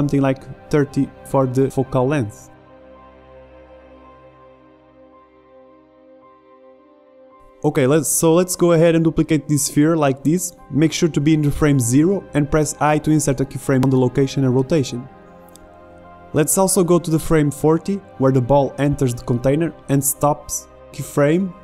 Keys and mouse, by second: 1.5 middle click, 1.9 click, 2.2 KP_0, 2.6 alt+a, 3.1 alt+a, 4.2 s, 4.4 click, 4.9 shift+Left, 6.0 middle click, 6.3 KP_7, 6.5 KP_5, 6.9 shift+d, 7.8 ctrl+z, 8.4 g, 10.1 i, 16.8-18.9 drag.